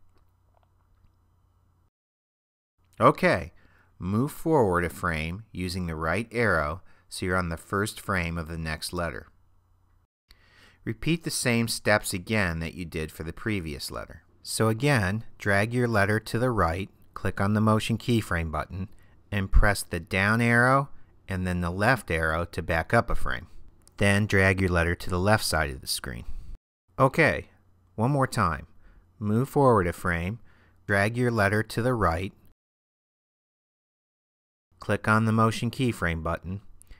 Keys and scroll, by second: 6.0 Right, 19.7 Down, 21.4 Left, 30.0 Right, 36.8 Down.